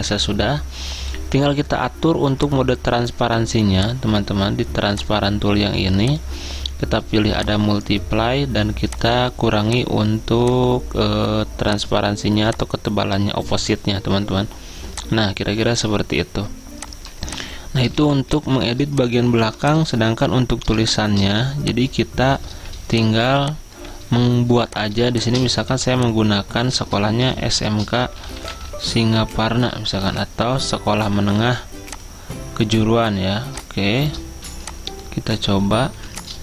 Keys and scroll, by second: 19.5 v, 24.7-25.4 typing, 26.8 Caps_Lock, 26.8-29.2 typing, 30.1 ctrl+a, 36.0 t.